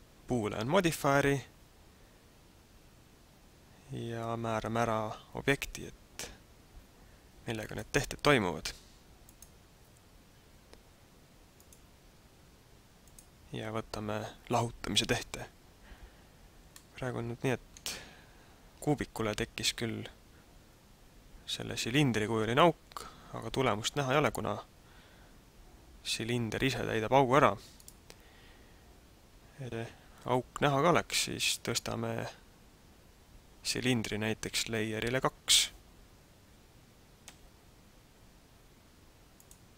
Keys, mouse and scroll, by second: 7.7 click, 11.5 click, 16.8 middle click, 27.9 right click, 37.2 m.